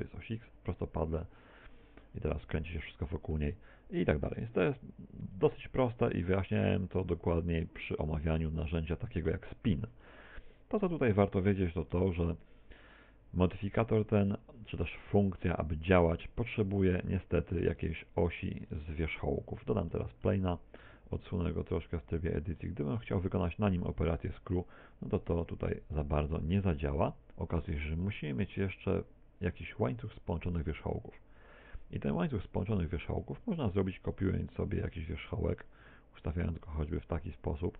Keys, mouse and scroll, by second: 2.1 click, 3.2 middle click, 7.7 middle click, 9.5 click, 10.5 click, 17.1 middle click, 20.5 a, 21.8 x, 22.3 Tab, 22.6 x, 23.6 shift+a, 25.0 middle click, 25.7 middle click, 26.0 Tab, 27.0 click, 27.8 middle click, 30.9 click.